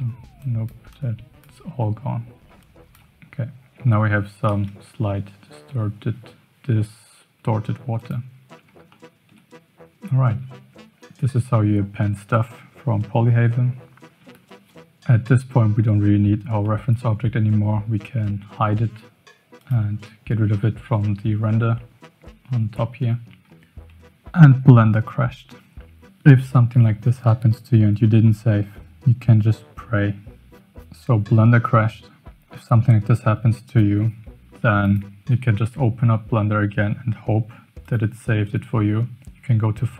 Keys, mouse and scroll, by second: 0.4 shift+click, 0.9 shift+click, 2.5 shift+click, 4.7 KP_0, 7.9 click, 8.9-9.3 shift+middle drag, 19.5 click.